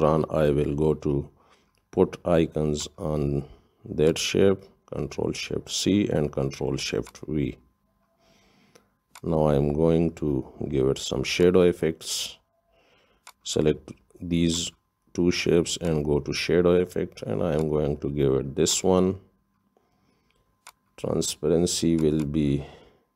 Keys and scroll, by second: 6.0 ctrl+shift+c, 8.2 ctrl+shift+v.